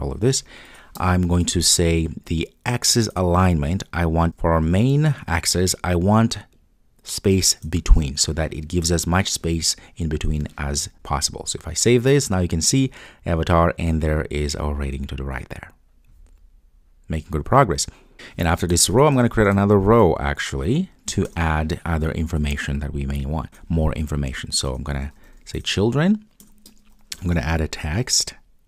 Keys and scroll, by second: 3.2 Return, 4.2 super+z, 7.7 Return, 10.9 super+s, 22.4 Return.